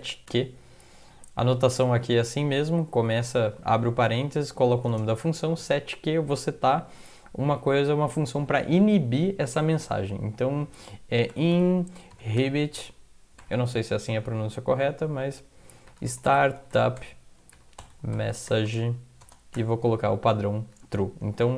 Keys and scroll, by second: 0.0-0.8 typing, 1.6 shift+Left, 1.8 shift+Left, 1.9 shift+Left, 2.1 shift+Left, 3.4 Right, 3.6 Right, 3.8 Right, 4.0 Right, 4.9 Return, 11.1-13.4 typing, 15.6-19.6 typing, 20.7 End, 20.7 typing.